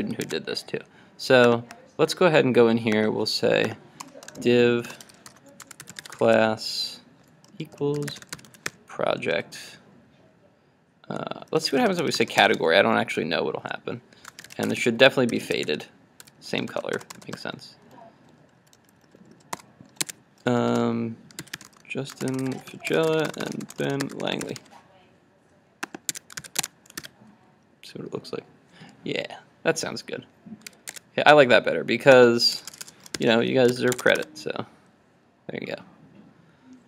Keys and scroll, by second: 0.3 super+Tab, 26.6 super+s, 26.7 super+Tab, 27.0 super+r, 30.9 super+Tab, 33.8 super+s, 34.1 super+Tab, 34.2 super+r.